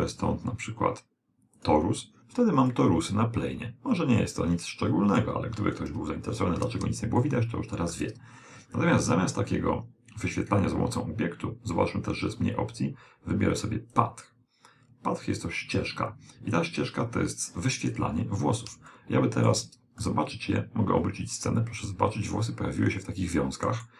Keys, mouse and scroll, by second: 2.8-4.8 middle drag, 6.0 KP_1, 7.2-9.0 middle drag, 14.0 click, 18.2-19.0 scroll down 1, 19.0 scroll up 1, 19.2-21.8 middle drag.